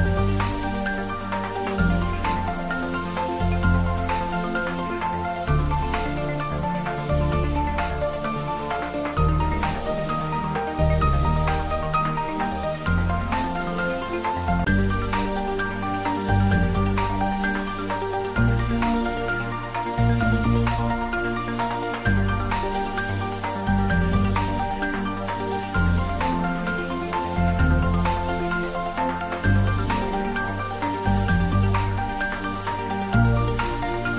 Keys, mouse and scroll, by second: 4.9 click, 9.9 click, 16.9 Tab, 18.2 ctrl+z, 20.9 `, 21.7 click, 22.5 Tab, 23.2 click, 23.6 scroll down 1, 25.2 click, 27.9 click, 28.8-29.5 scroll up 1, 29.5-30.2 middle click, 30.4 click.